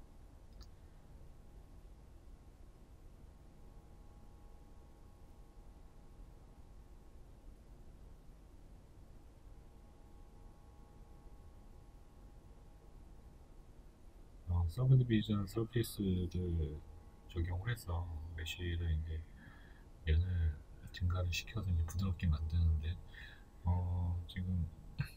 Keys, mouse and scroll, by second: 1.1 z, 1.6 shift+middle click, 2.0 scroll up 1, 2.7 scroll down 1, 3.8 shift+middle click, 5.4-12.8 middle drag, 5.8-6.3 scroll up 2, 7.2-7.7 scroll up 2, 12.8-14.7 drag, 14.7-21.0 middle drag, 15.8-16.2 scroll up 2, 16.5 scroll down 2, 16.8 Tab, 20.4 3, 21.0 right click, 21.6-23.0 middle drag, 23.0 shift+right click, 23.4-25.1 middle drag.